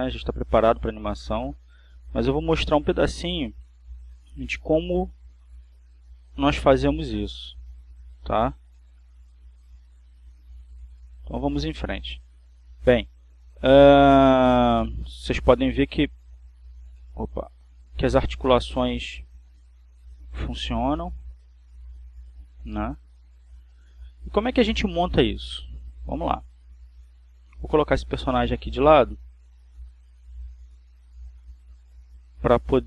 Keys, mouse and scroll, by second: 1.9 click, 2.7 right click, 4.1 right click, 5.3 r, 8.1 click, 8.9 right click, 9.8 r, 13.6 click, 14.6 right click, 15.5 r, 16.4 click, 16.8 right click, 17.1 r, 18.0 Escape, 18.7 right click, 19.6 r, 22.0 click, 22.7 right click, 23.0 r, 24.7 click, 27.5-31.8 shift+middle drag.